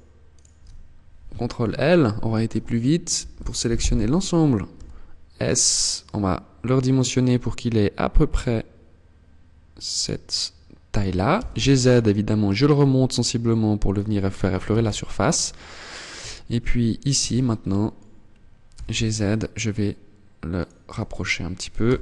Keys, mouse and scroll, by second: 2.5 ctrl+l, 4.0 s, 10.3 click, 10.7 g, 13.2 click, 13.9 z, 15.5 a, 16.4 b, 18.0 g, 20.0 click, 20.2 Tab, 21.1 z.